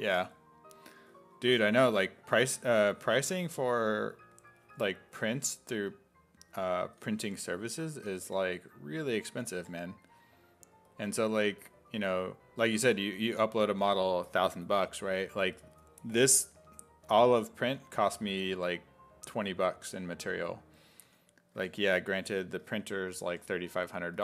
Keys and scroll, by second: 0.3 s, 1.4 1, 2.8 1, 3.3 1, 5.7 s, 6.9 s, 7.2 5, 7.9 s, 8.3 5, 9.3 s, 9.6 5, 11.9 s, 12.6 s, 12.9 5, 15.5 s, 17.6 s, 18.4 s, 20.4 s, 21.1 s, 21.6 1, 22.2 s, 23.3 1.